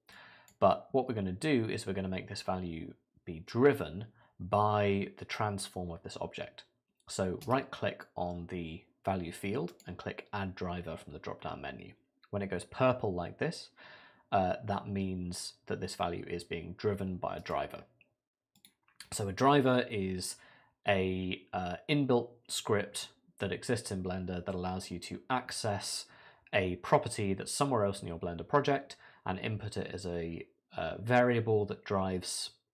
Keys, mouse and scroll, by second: 0.1 click, 7.4 right click, 17.4 right click.